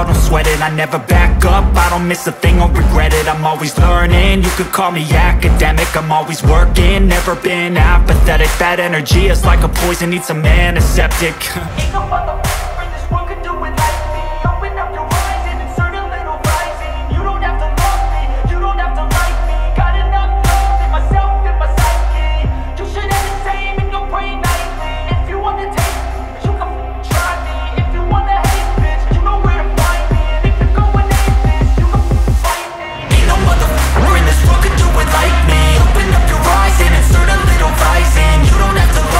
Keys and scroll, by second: 0.9 Right, 4.3 Right, 4.9 Up, 10.3 ctrl+z, 20.5 Up.